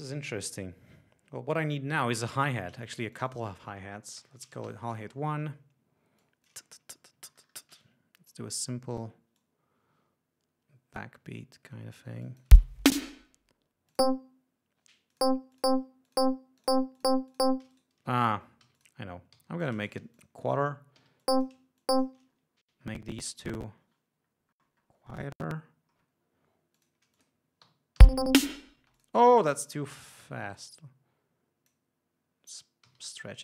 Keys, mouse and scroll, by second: 3.3 click, 4.4 shift+h, 4.8 shift+space, 4.9 shift+1, 5.1 shift+Return, 6.4 click, 7.2 ctrl+scroll up 2, 7.9 d, 8.5 click, 9.6-11.4 drag, 11.7 ctrl+scroll up 2, 12.5 click, 12.7 space, 14.1 click, 15.3 click, 15.8 click, 16.3 click, 16.8 click, 17.2 click, 18.9 g, 19.0 click, 19.6 s, 19.8 shift+click, 20.4 shift+click, 21.2 e, 21.4-21.9 drag, 22.0-22.4 shift+drag, 22.5-23.8 shift+scroll down 5, 23.9-24.4 scroll down 2, 24.5-25.1 scroll up 2, 25.2-25.7 scroll up 2, 26.1 scroll down 2, 26.9 click, 27.3 click, 28.2 l, 29.0 space, 29.1 click, 30.4 t, 30.7-32.1 drag, 33.0 g.